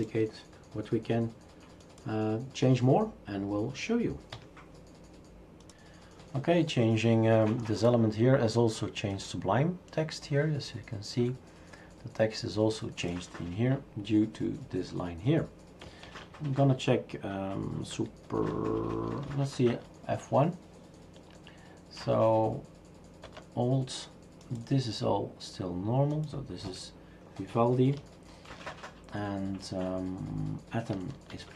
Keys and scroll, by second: 4.3 Escape, 16.1 shift+super+q, 19.3 super+F1, 26.6 Escape, 28.5 shift+super+q, 31.3 super+F2.